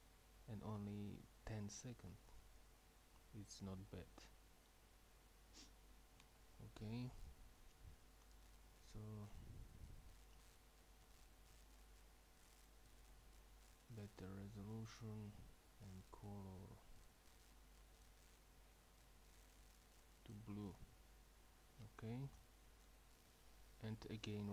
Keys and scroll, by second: 7.2 Escape, 22.4 F12.